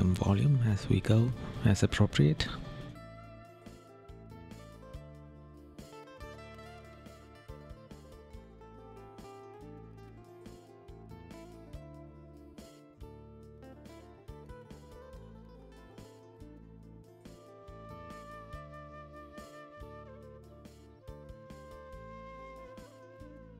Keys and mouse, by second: 0.3 right click, 1.5 right click, 3.2 right click, 4.1 right click, 5.6 right click, 6.3 right click, 7.2 right click, 7.9 right click, 9.3 right click, 11.1 right click, 11.7 right click, 14.0 right click, 15.0 right click, 16.1 right click, 19.2 right click, 19.7 right click, 23.2 right click.